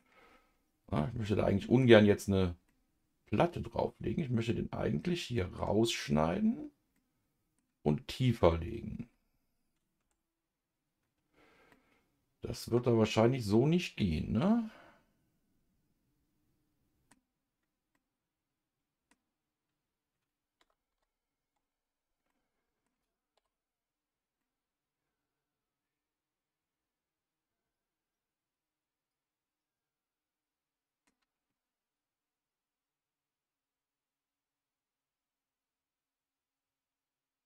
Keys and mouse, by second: 1.2 middle click, 2.7-5.6 middle drag, 6.9 middle click, 9.1 a, 10.0 Tab, 11.7-17.1 middle drag, 17.9-19.1 middle drag, 20.9 KP_Divide, 22.3 middle click, 23.4 KP_Divide, 24.4-31.1 middle drag.